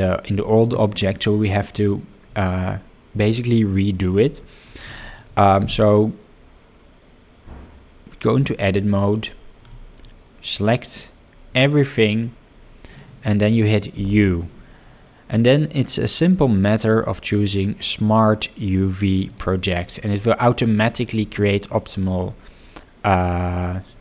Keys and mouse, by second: 5.0 shift+middle drag, 7.8 Tab, 13.9 u.